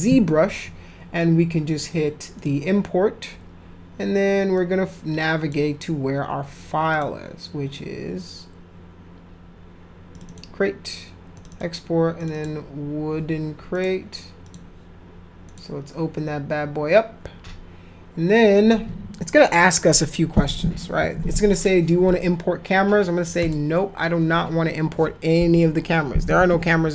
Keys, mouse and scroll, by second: 2.4 click, 4.5 click, 6.9 click, 10.1 click, 10.3 click, 11.3 click, 11.5 click, 12.2 click, 12.3 click, 13.7 click, 14.4 click, 15.5 click, 23.4 click.